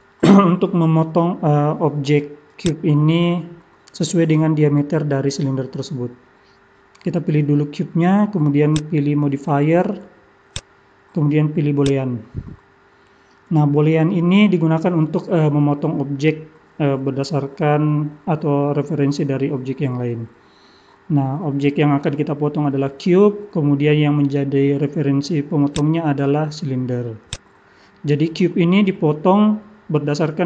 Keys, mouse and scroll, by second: 2.6 click, 4.7 middle click, 8.6 click, 10.5 click, 25.7 click.